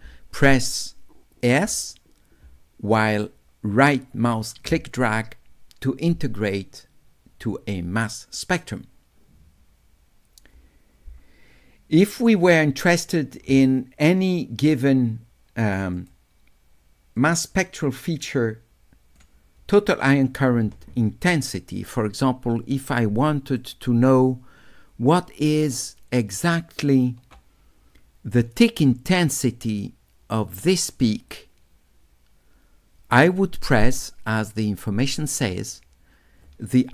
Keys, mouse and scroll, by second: 14.8 right click, 16.0 click, 17.3-19.2 drag, 23.7 shift+right click, 23.9-26.0 shift+drag, 26.0 shift+right click, 35.5 click.